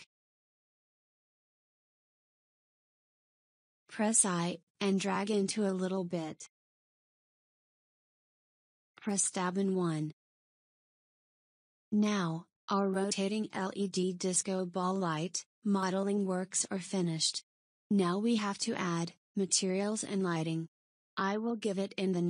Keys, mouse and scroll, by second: 0.0 shift+click, 0.5-3.5 middle drag, 8.7-11.7 middle drag, 11.7 Tab, 14.2 KP_1, 14.9-15.6 scroll down 3, 15.6 click, 16.0-16.4 scroll down 3, 17.1-18.2 shift+middle drag, 18.2-21.1 scroll up 1.